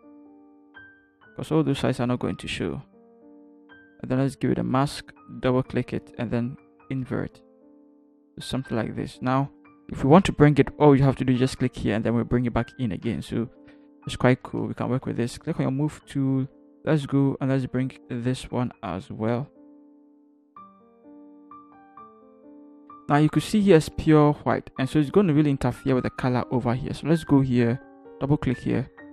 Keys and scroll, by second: 15.3 v, 22.2 Return, 22.7 Up.